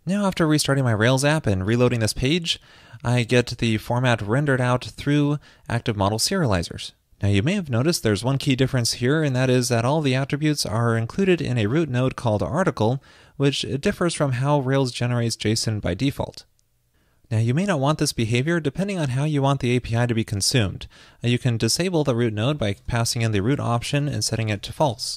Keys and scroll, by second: 25.0 super+s.